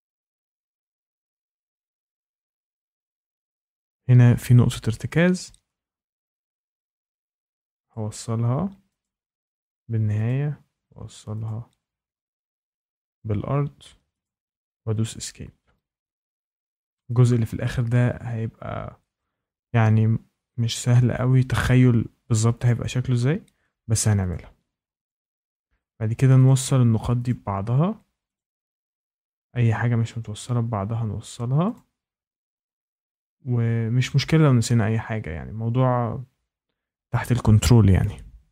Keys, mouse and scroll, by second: 0.6 click, 0.8 Escape, 1.1 click, 1.6 click, 1.9 Escape, 2.4 click, 2.7 click, 2.8 Escape, 4.6 click, 5.4 Escape, 7.8 click, 9.0 click, 9.4 Escape, 10.2 click, 11.4 click, 11.7 Escape, 12.6 click, 14.2 click, 14.3 Escape, 17.2 click, 20.8-22.2 drag, 22.6 click, 23.4 Escape, 24.2 click, 25.0 click, 25.6 Escape, 26.4 click, 27.2 click, 27.4 Escape, 28.3 click, 29.3 Escape, 31.7 click, 32.6 click, 33.0 Escape, 38.3 Escape.